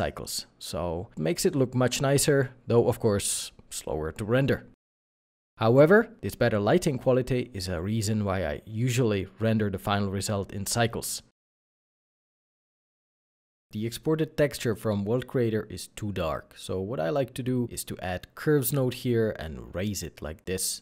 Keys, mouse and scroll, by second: 3.9 middle click, 8.4 middle click, 13.7 scroll down 1, 13.9 middle click, 14.2-14.8 scroll down 1, 14.8 middle click, 16.4 shift+a, 17.1 u, 18.2 u, 18.6 g, 19.7 g.